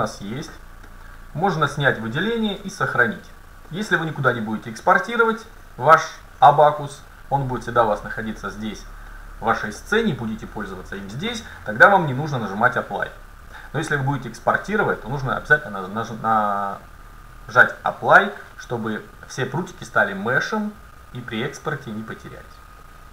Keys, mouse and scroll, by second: 0.5-0.9 scroll down 1, 0.9 middle click, 1.6 middle click, 1.7 a, 2.7 ctrl+s, 3.7-7.2 middle drag, 8.5-9.1 scroll up 1, 9.1-9.8 scroll down 1, 9.8 middle click, 12.1 middle click, 22.0 middle click, 22.9 scroll down 1.